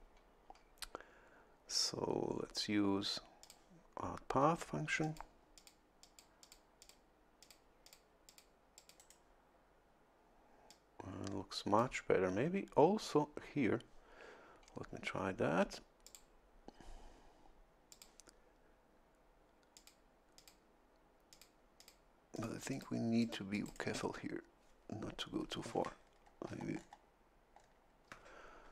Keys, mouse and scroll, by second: 3.4 click, 5.0 click, 5.6 click, 6.0 click, 6.8 click, 7.4 click, 7.8 click, 8.3 click, 8.8 click, 9.0 right click, 10.7-12.0 drag, 16.0 click, 17.9 click, 19.7 click, 20.4 click, 21.3 click, 21.8 click, 22.3 click, 22.7 click, 23.2 click, 23.6 click, 26.0-26.7 shift+scroll down 4, 27.5 shift+scroll down 2.